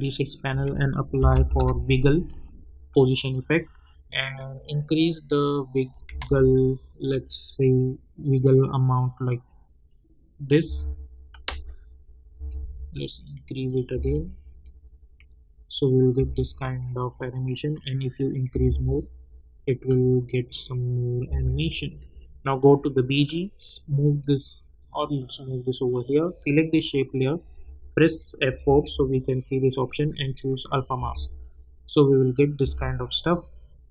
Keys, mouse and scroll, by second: 0.4-2.0 typing, 2.9-6.2 drag, 6.2 ctrl+z, 8.6-10.6 drag, 10.6 space, 12.9 click, 13.9 space, 16.1 space, 17.6 click, 18.5 space, 21.2 space, 21.9-26.2 drag, 28.5 F4, 29.8 click, 30.9 space, 33.3 click.